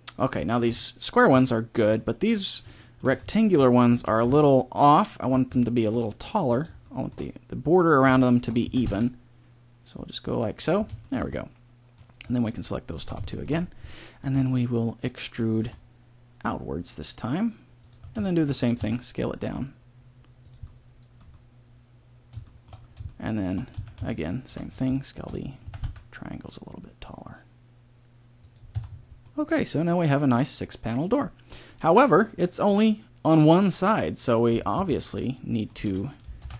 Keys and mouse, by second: 3.9 b, 8.6 s, 12.4-13.8 middle drag, 15.6 e, 18.8 s, 20.6-22.2 middle drag, 23.7 c, 25.6 s, 28.7 Tab, 28.9 middle click, 34.7 Tab, 36.4 ctrl+l.